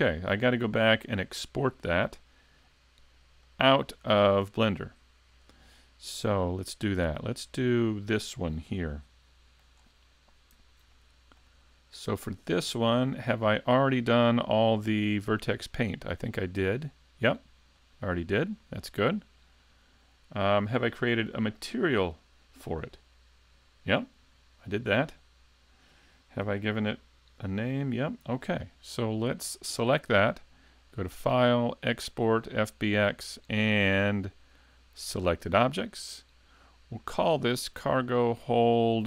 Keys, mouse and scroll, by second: 4.3-5.3 scroll up 1, 5.3 right click, 5.3-6.5 scroll up 1, 7.3 click, 8.9 shift+middle click, 9.8-10.5 scroll up 3, 10.9 middle click, 11.6 shift+middle click, 12.2 middle click, 12.7 shift+middle click, 13.4 right click, 17.7 click, 22.9 click, 26.5 n, 27.6 n, 30.9 click.